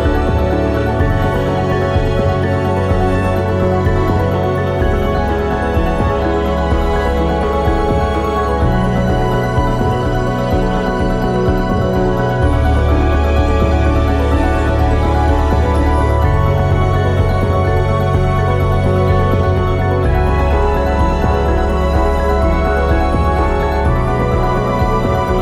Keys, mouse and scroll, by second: 0.5 click, 2.4 ctrl+r, 5.8 click, 6.9 ctrl+r, 11.3-13.9 middle drag, 13.9-16.9 drag, 16.9-18.7 middle drag, 18.7 click, 19.4 KP_0, 21.1 e, 23.8 click.